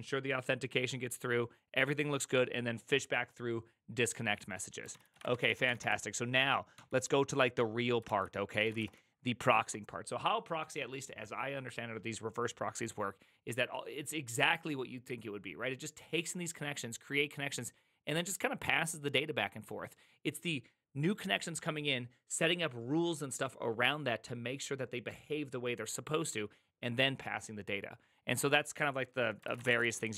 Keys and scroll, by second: 4.9 ctrl+c, 5.0 ctrl+c, 5.0-6.2 typing, 6.7 ctrl+h, 7.8-8.7 typing, 8.5 ctrl+c, 8.6 ctrl+:, 8.8 Return, 29.3-30.1 typing.